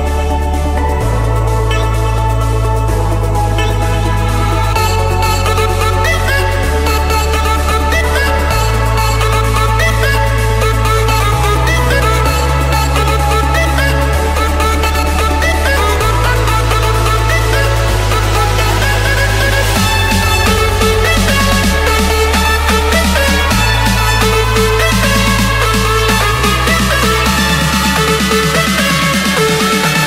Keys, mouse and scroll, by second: 0.3 typing, 0.7 Return, 3.3-4.3 drag, 4.5 Escape, 6.5-9.0 typing, 10.7 Return, 12.0 click, 12.6 Return, 13.8-14.8 typing, 15.1 Return, 15.3 Return, 16.6-17.7 drag, 18.1-20.2 drag, 21.6 Return, 22.3 click, 23.0 click, 24.3 j, 25.1 Return, 26.7 click, 27.3 middle click, 27.5 middle click, 27.7 scroll, 27.9 Escape, 29.5 click.